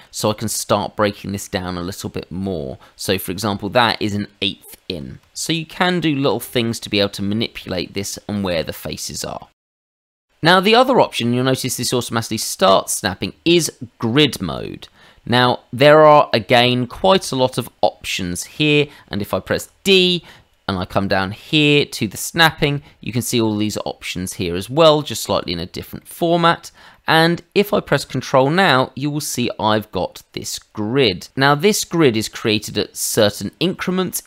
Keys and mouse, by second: 9.4 middle click, 9.7 ctrl+z, 10.1 Tab, 14.5 click, 18.6 Escape, 19.6 d, 21.4 click, 21.9 click, 25.2 Escape, 26.0 middle click, 26.4 shift+middle click, 26.9 middle click.